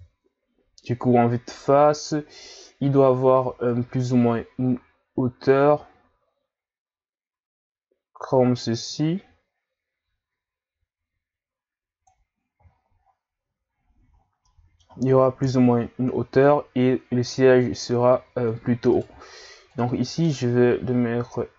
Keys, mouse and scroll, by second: 3.7 click, 12.7 scroll down 4, 13.0-13.3 scroll up 4, 13.3 a, 14.2 scroll down 2, 14.5-15.4 middle drag, 15.4 KP_3, 17.8 ctrl+scroll up 1, 18.9 right click, 19.7 click.